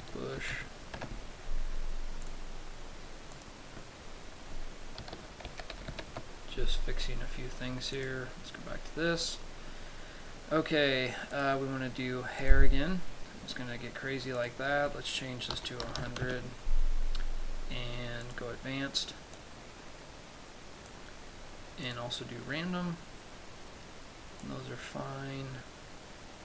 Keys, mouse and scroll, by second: 2.8 click, 3.9 click, 8.5 click, 9.4-10.0 scroll down 1, 10.2 scroll down 1, 11.0-11.5 scroll up 1, 11.8 click, 15.0 click, 18.7 click, 19.8 click, 22.4 click, 24.9 click.